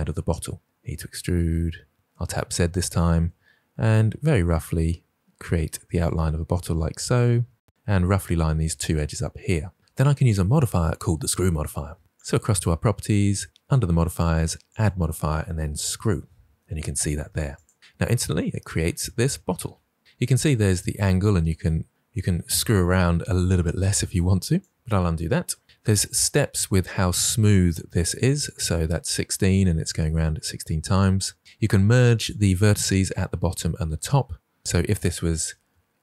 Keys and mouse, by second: 0.6 e, 1.9 y, 1.9 z, 2.7 click, 3.1 e, 3.6 click, 3.8 e, 4.5 z, 4.8 click, 5.2 e, 6.5 x, 12.1 click, 14.6-17.6 drag, 20.7-24.7 drag, 32.2 click, 35.3 g, 35.6 x.